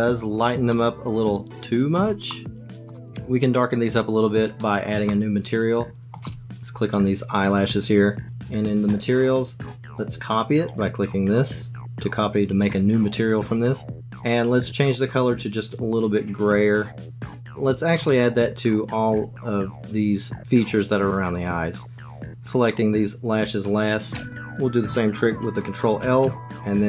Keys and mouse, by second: 0.8-2.0 shift+drag, 2.4 click, 4.8-6.0 shift+middle drag, 6.0 shift+click, 7.2 click, 8.2 click, 13.6 click, 14.6 click, 18.2 click, 25.8 ctrl+l.